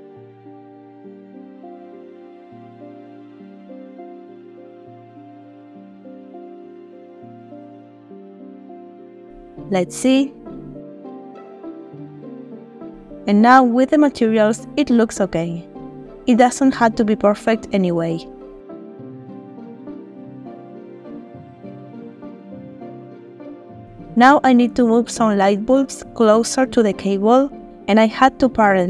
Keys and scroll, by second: 1.1 alt+g, 4.6 g, 8.9 Tab, 9.3 space, 13.8 space, 26.4 g, 26.6 z, 28.0 r.